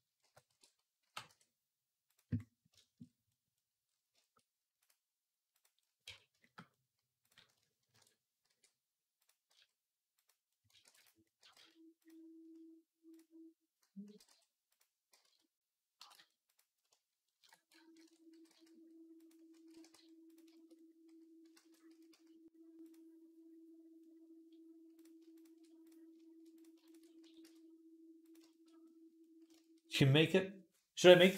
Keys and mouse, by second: 0.0 alt+g, 0.3 alt+r, 0.4-2.5 right drag, 0.8 g, 2.5 shift+click, 2.8 right click, 3.4-6.3 drag, 5.9 Tab, 6.3-10.3 shift+right drag, 7.7 ctrl+KP_Add, 8.3 e, 9.3 s, 10.3 ctrl+click, 10.6 ctrl+r, 10.7 right click, 10.9-12.9 middle drag, 11.2 g, 12.9 click, 13.0-24.7 middle drag, 13.9 g, 15.0 z, 15.8 g, 17.2 ctrl+KP_Add, 18.1 g, 19.3 a, 19.5 r, 21.4 ctrl+z, 21.7 s, 24.7 click, 24.8 alt+shift+middle click, 25.1 alt+shift+click, 25.2 alt+shift+middle click, 25.6 click, 25.8 alt+shift+middle click, 26.7 alt+shift+click, 26.8-28.2 middle drag, 27.0 s, 28.2 shift+click, 28.5 middle click, 29.4 shift+click, 29.6-31.3 middle drag.